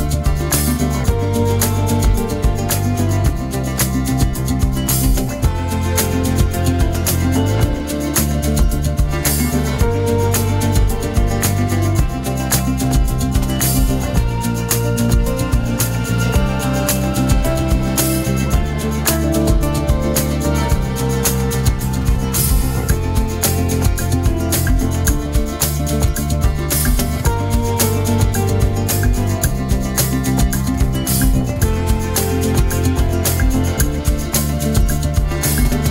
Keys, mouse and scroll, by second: 0.0 Tab, 1.4 click, 3.5-4.2 scroll down 2, 5.0 click, 8.0 g, 15.2-15.8 scroll up 1, 15.8-18.9 shift+middle drag, 18.9-20.0 drag, 20.0-22.9 middle drag, 22.9 click, 23.4-26.0 middle drag, 26.0-26.5 scroll up 3, 26.5-29.4 middle drag, 29.4 click, 30.1-31.1 middle drag, 31.1 scroll down 1, 31.4-34.4 middle drag, 34.7 click, 35.3-35.9 shift+middle drag.